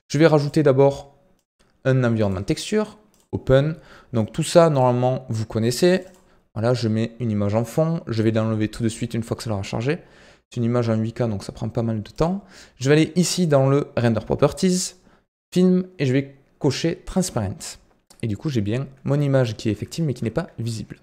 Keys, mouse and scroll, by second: 0.3-10.8 drag, 12.1-15.0 drag, 15.3-18.0 drag, 18.0-19.4 middle drag, 19.4-19.8 scroll up 2, 19.8 shift+middle click, 20.7-21.0 scroll down 3.